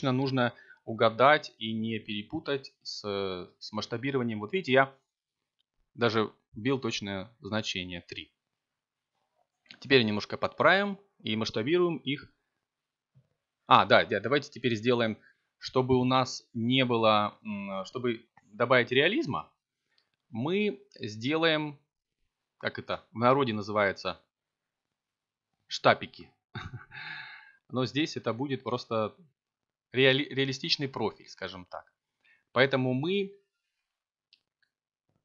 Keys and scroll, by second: 4.1 s, 6.4 y, 15.2 0, 16.5 ., 17.1 9, 17.8 5, 23.0 s, 24.3 y, 26.3 0, 26.9 ., 28.3 9, 29.8 6.